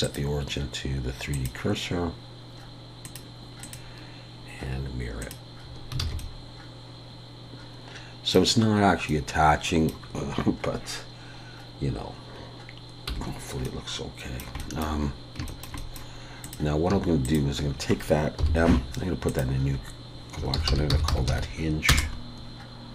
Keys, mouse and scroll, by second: 3.0 click, 6.0 alt+a, 6.2 middle click, 9.1 middle click, 9.9-12.1 scroll up 1, 13.1 /, 13.6 middle click, 15.0-15.5 scroll up 2, 15.5 shift+middle click, 15.6 shift+middle click, 15.8 middle click, 16.4 click, 17.2 shift+click, 18.4 m.